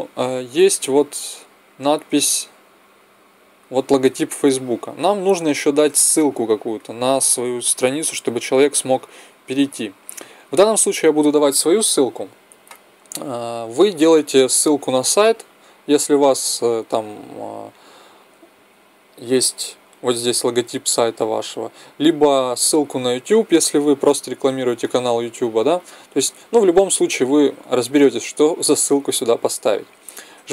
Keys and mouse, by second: 1.9-3.5 drag.